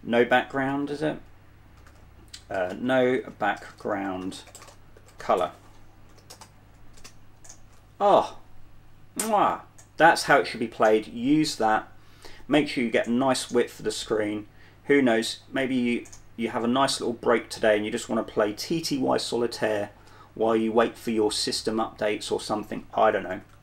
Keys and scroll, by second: 0.0-0.5 typing, 0.8 super+1, 1.2 super+2, 3.0-7.3 typing, 5.1 super+1.